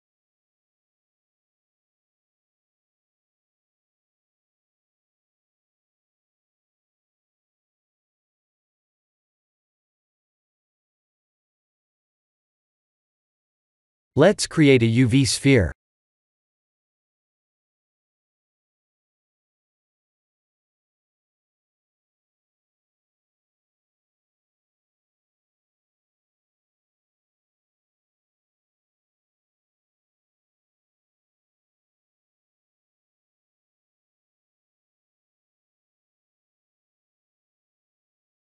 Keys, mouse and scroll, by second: 1.6 middle click, 3.8 click, 4.2-5.4 scroll down 10, 6.3 click, 6.3-6.8 scroll down 2, 8.9 KP_1, 10.3 click, 14.4 click, 14.8 shift+a, 19.4 scroll down 3, 20.3 scroll down 1, 20.4 shift+middle click, 21.4 scroll up 3, 23.2 right click, 25.7 s, 28.5 click, 29.6 click, 31.7 click, 32.7 shift+middle click.